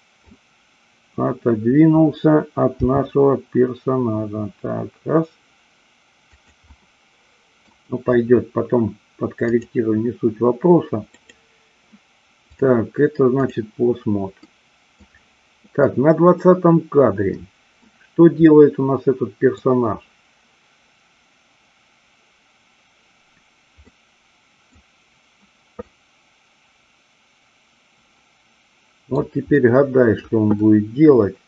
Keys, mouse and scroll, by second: 2.8 g, 6.2 click, 6.8 middle click, 9.4-10.4 drag, 11.1 click, 12.6 click, 14.5-15.0 middle drag, 15.8-17.8 middle drag, 18.5-19.5 middle drag, 23.8-24.8 middle drag, 25.8-29.1 middle drag, 29.5-30.1 middle drag, 30.5-31.4 middle drag.